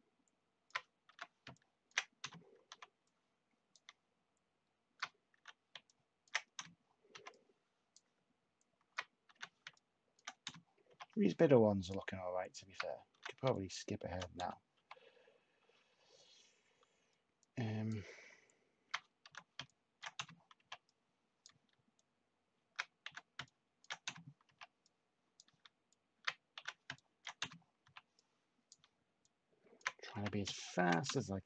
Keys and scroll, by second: 1.1 h, 2.1 /, 5.3 h, 6.5 /, 9.3 h, 10.4 /, 13.1 h, 14.3 /, 19.2 h, 20.5 /, 23.0 h, 24.4 /, 26.5-27.8 typing, 30.1-31.0 typing.